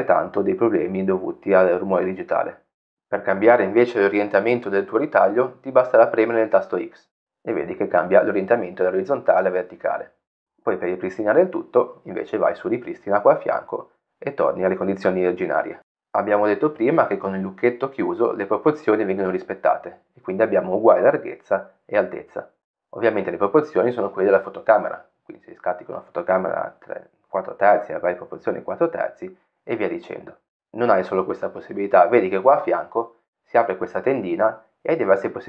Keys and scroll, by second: 3.6 x, 9.8 x, 11.2 x.